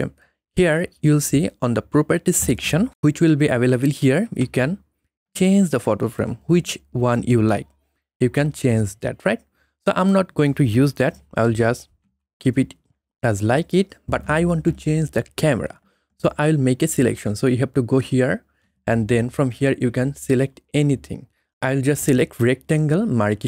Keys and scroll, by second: 11.3 ctrl+z, 11.9 ctrl+z.